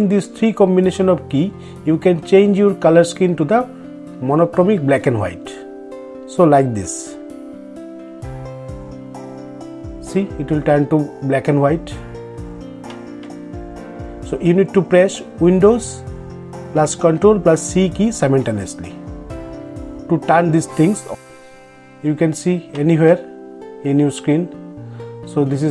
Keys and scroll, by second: 3.6 ctrl+o, 17.7 ctrl+`.